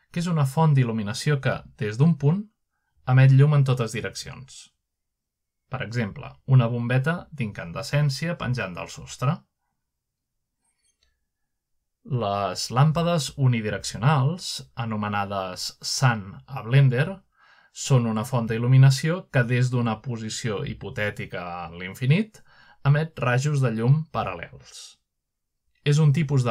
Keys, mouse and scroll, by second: 0.0 click, 1.7-2.2 middle drag, 2.3 click, 4.8 click, 6.3 middle click, 9.0 z, 10.4-11.7 scroll up 1, 10.9-11.7 shift+middle drag, 11.8-12.7 middle drag, 13.1 middle click, 13.5 g, 17.3 click, 18.8 click, 20.6 click, 22.3 scroll down 2, 23.0 scroll up 2, 23.7 middle click, 24.3 middle click, 25.0 click, 26.2-26.5 middle drag.